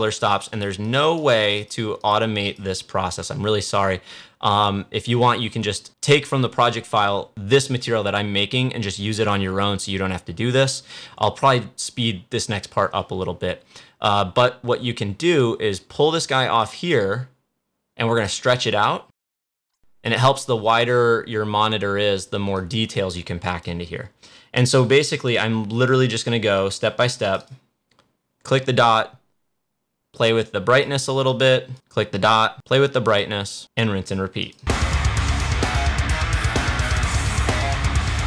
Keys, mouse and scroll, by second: 15.3-18.9 drag, 19.0-22.3 drag, 22.5-25.2 drag, 30.6-38.2 drag.